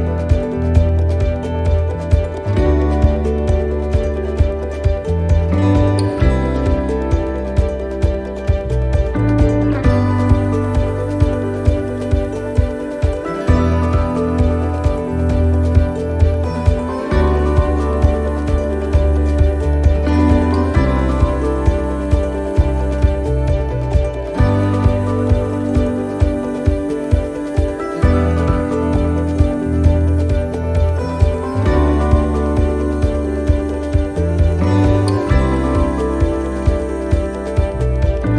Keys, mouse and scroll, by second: 0.7 click, 1.6 shift+middle click, 2.9 click, 4.9 s, 6.7 s, 8.4 middle click, 9.8 click, 11.9 middle click, 12.3-12.7 scroll up 2, 12.8 shift+middle click, 13.6 middle click, 14.6 click, 16.5 s, 18.3 click, 22.1 click, 22.1 s, 24.2 right click, 25.7 l, 26.3 x, 27.2 scroll up 1, 27.7-28.4 scroll down 1, 28.4 right click, 32.8 right click, 33.7 l, 35.0 shift+d, 36.2 click.